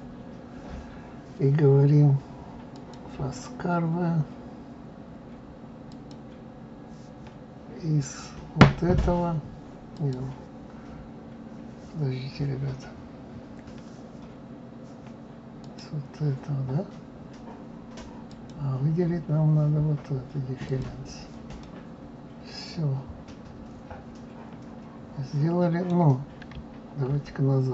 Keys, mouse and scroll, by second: 2.7 click, 5.9 click, 8.0 click, 9.9 click, 18.3 click, 20.6 click, 21.6-24.6 middle drag.